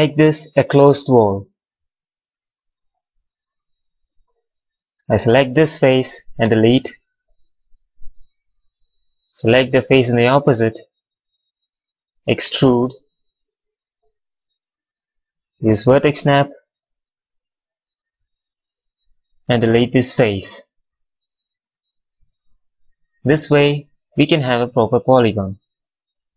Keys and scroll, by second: 6.3 Delete, 13.2 w, 17.2 v, 18.7 4, 20.0 Delete, 20.8 q, 22.1 6, 23.6 6.